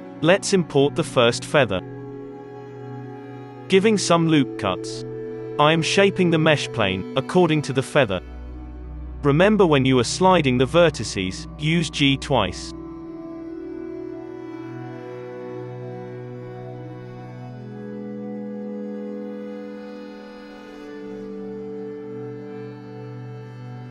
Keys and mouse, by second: 0.0-1.4 middle drag, 0.0 shift+a, 1.8 Tab, 2.0 z, 2.8 Tab, 2.8 alt+a, 2.9 Tab, 3.2 ctrl+r, 3.2-5.3 drag, 5.3 1, 5.7 ctrl+z, 5.7 alt+a, 5.7 ctrl+r, 6.3 ctrl+r, 6.9 alt+a, 7.2 2, 7.4-11.0 drag, 8.5 ctrl+z, 8.6 g, 9.2 alt+a, 9.7 g, 10.3 alt+a, 10.7 ctrl+r, 11.0 middle click, 11.0 1, 11.4 ctrl+r, 11.8 alt+a, 12.2-13.3 drag, 12.2 g, 12.9 g, 13.3-14.6 drag, 13.6 g, 14.0 g, 15.1 alt+a, 15.5 ctrl+r, 16.3 ctrl+r, 16.6 alt+a, 17.0 2, 17.2 g, 18.3-20.9 typing, 18.9 alt+a, 20.5 Tab, 20.8 Tab, 22.1-23.8 drag, 22.6 Delete, 23.0 Tab, 23.5 Tab, 23.7 1, 23.8 middle click.